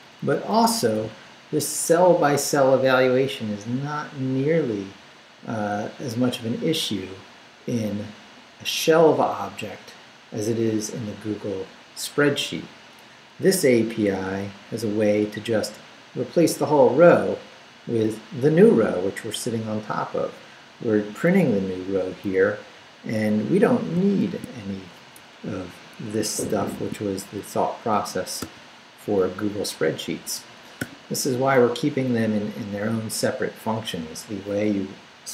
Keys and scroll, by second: 1.0 Right, 14.0 Down, 21.4 Left, 22.2 Down, 24.2 shift+v, 25.1 shift+BackSpace, 26.2 Escape, 26.8 shift+v, 27.0 shift+Down, 28.4 d, 29.0 Up, 30.8 o.